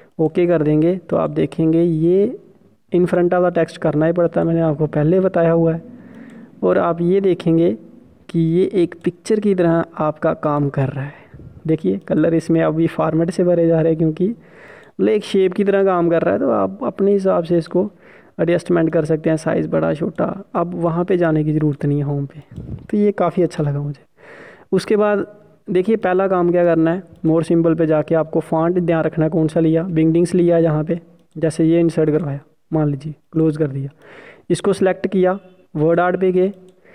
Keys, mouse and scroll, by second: 8.0-8.5 scroll up 1, 9.2 scroll up 1, 9.5 click, 15.4 click, 18.3 click, 24.5 Delete, 25.6 click, 32.0 click.